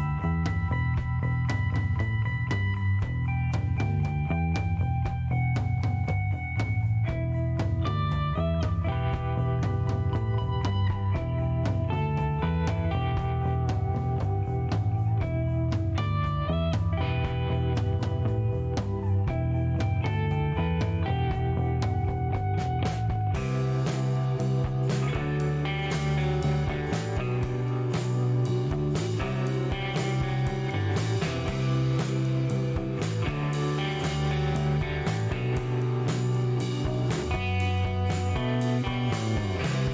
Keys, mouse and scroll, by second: 0.8 middle click, 2.4 scroll up 1, 2.9 click, 4.0 click, 4.4 click, 5.9 click, 6.6 scroll down 1, 7.6-8.9 drag, 9.4 middle click, 10.3 middle click, 11.1 middle click, 11.4 scroll up 1, 12.4 click, 13.2 click, 14.5 click, 15.3 scroll down 1, 15.5 middle click, 18.8 scroll up 1, 20.3-22.5 drag, 22.9 middle click, 23.1 scroll down 1, 24.2 click, 27.1 click, 28.3 KP_1, 28.4 KP_2, 29.0 KP_Enter, 29.8 middle click, 30.7 click, 32.2-33.2 drag, 33.4 middle click, 34.0 middle click, 34.3 scroll up 1, 34.6 middle click, 37.0 click, 39.1 click.